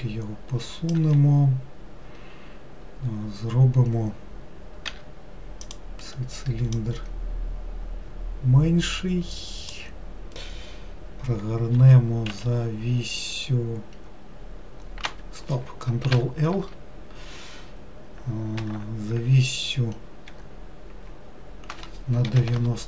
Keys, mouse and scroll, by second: 4.9 3, 5.6 click, 6.8 click, 11.8 r, 16.2 ctrl+l, 18.6 r.